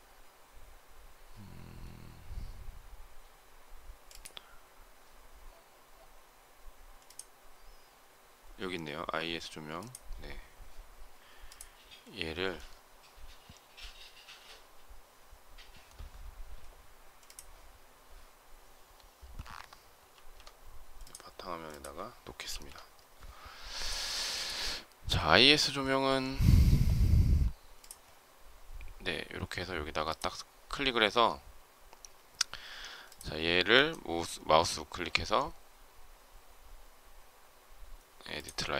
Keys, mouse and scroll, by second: 20.0 ctrl+x, 22.3 ctrl+v.